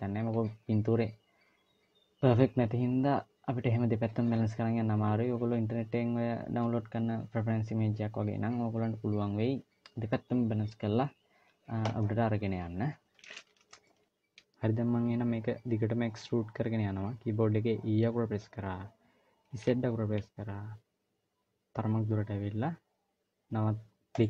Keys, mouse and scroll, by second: 13.7 shift+middle click, 17.8 e.